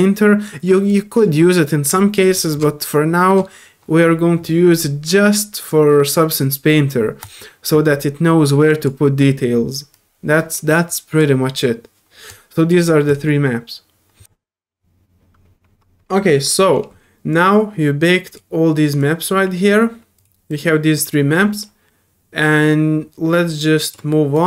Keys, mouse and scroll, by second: 0.9 drag, 1.3 middle drag, 1.3 scroll up 2, 1.9 click, 2.3 right drag, 2.3 middle drag, 2.3 scroll up 2, 7.2 click, 8.7 click, 9.9-11.2 drag, 12.3 click, 13.1 click, 14.2 ctrl+F1.